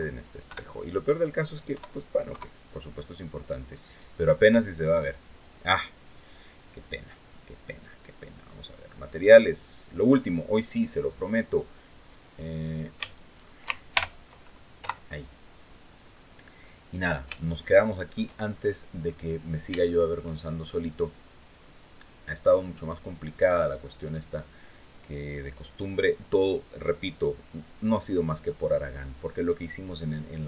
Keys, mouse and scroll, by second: 0.2 KP_7, 1.4 KP_7, 2.9-3.4 scroll up 2, 6.7 click, 9.0 click, 11.7 right click, 12.3 right click, 12.8 shift+right click, 13.6 ctrl+shift+l, 14.5 Return, 15.8-16.1 scroll down 2, 17.1 shift+middle click, 18.2-18.6 shift+scroll up 3, 18.7-19.0 scroll down 2, 19.6 shift+middle click, 21.8 click, 22.5 click, 26.5-28.4 middle drag.